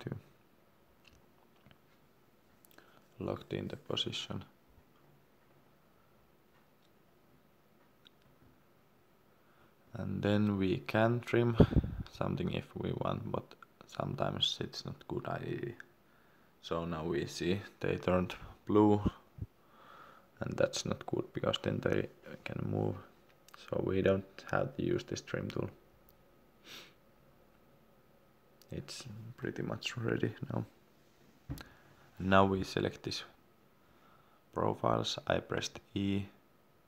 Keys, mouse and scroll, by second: 2.2 scroll down 1, 2.8-3.1 scroll up 1, 5.9 Escape, 7.0 middle click, 10.4 click, 18.0 ctrl+z, 20.4 click, 25.8 Escape, 27.0 scroll up 1, 27.3-27.7 scroll down 1, 27.8 scroll up 1, 28.4-28.7 scroll down 1, 29.4 e, 32.0 click, 32.7 scroll down 1, 33.5 click, 36.4-36.7 scroll up 1.